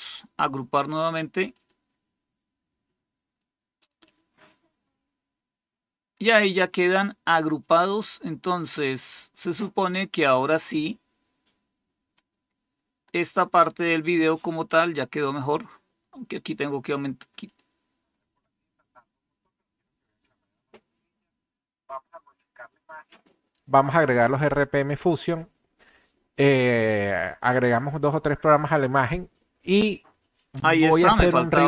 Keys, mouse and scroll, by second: 1.4 click, 7.6-13.0 drag, 14.6 click, 17.3 click, 23.4 click.